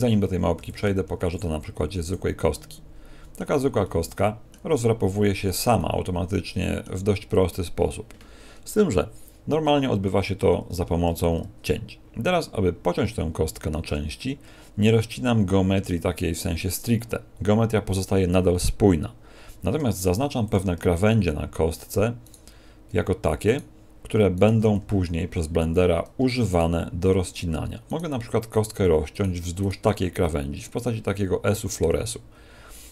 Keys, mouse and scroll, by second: 0.5 x, 1.1 shift+a, 2.5 middle click, 3.8 middle click, 4.5 Tab, 4.9-5.5 scroll down 2, 5.7 middle click, 19.7 ctrl+Tab, 22.2 right click, 23.4 shift+right click, 24.7 z, 26.5 shift+right click, 27.8 shift+right click, 32.7 middle click.